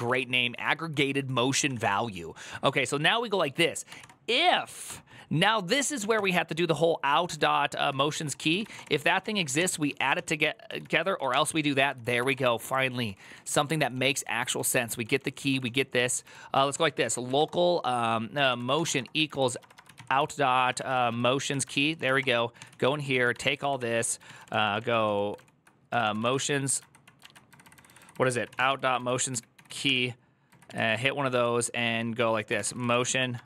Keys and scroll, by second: 0.0-0.3 typing, 1.5-2.3 typing, 5.2 typing, 7.4-14.5 typing, 16.3-17.6 typing, 21.2-22.0 typing, 22.0 ctrl+c, 22.0 ctrl+:, 22.0 Return, 24.0 ctrl+w, 24.0 typing, 29.0-29.9 typing.